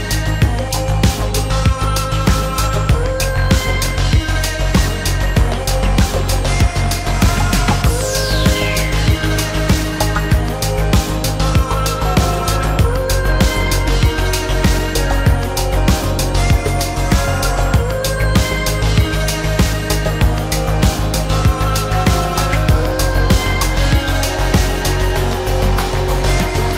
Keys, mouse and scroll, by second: 1.9 space, 2.2 shift+click, 2.6 shift+middle click, 4.0 shift+v, 8.0 space, 10.7 ctrl+a, 13.0 Escape, 13.8 shift+v, 15.4 shift+middle click, 18.7 shift+v, 20.4 shift+middle click, 21.6 shift+middle click, 22.9 shift+middle click.